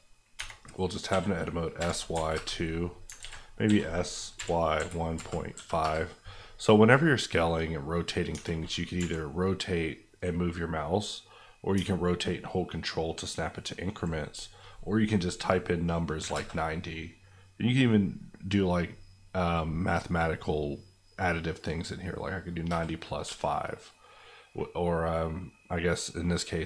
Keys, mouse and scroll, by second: 0.4 Tab, 1.1-2.1 typing, 2.3 KP_Enter, 3.2 ctrl+z, 3.6-5.5 typing, 5.8 KP_Enter, 6.9 middle click, 8.3 Tab, 8.9 r, 16.2 KP_9, 16.3 KP_0, 22.7 KP_Add, 23.2 KP_5.